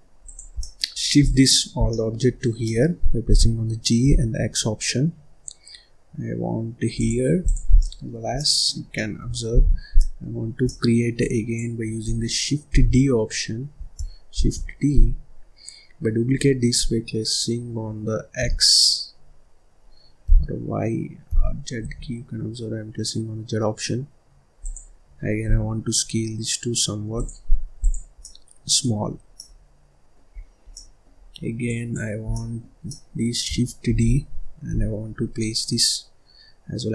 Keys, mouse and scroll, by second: 0.2 click, 0.5 middle click, 0.9 scroll up 1, 1.1 click, 1.7 scroll down 1, 1.8 middle click, 2.2-2.6 scroll up 1, 2.6 middle click, 3.2 g, 7.4 click, 7.6 scroll down 1, 7.7-8.8 middle drag, 8.8 scroll down 1, 8.9 middle click, 9.5 ctrl+s, 9.9 middle click, 10.3-10.6 scroll up 1, 10.6 middle click, 11.1 click, 12.6 ctrl+d, 14.2 shift+d, 25.4 s, 27.7 click, 28.1 middle click, 28.9-29.3 scroll up 4, 29.3 middle click, 30.2-30.6 scroll down 5, 30.6 middle click, 31.2-31.6 scroll up 1, 31.6 click, 32.2 scroll down 1, 32.2-33.8 middle drag, 33.8 shift+d.